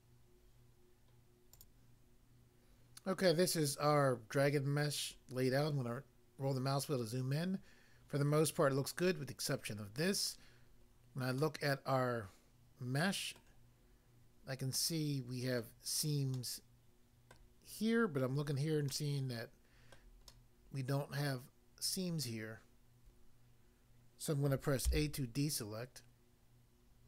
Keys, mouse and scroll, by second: 1.5 click, 1.7 click, 5.2 scroll up 1, 5.7-6.5 scroll up 1, 10.9-11.5 scroll up 1, 11.5 middle click, 13.4 middle click, 13.9-14.6 scroll up 1, 14.8 middle click, 15.6 middle click, 16.4 middle click, 17.4 middle click, 18.9 middle click, 20.0 middle click, 20.3 middle click, 21.3 middle click, 24.9 a.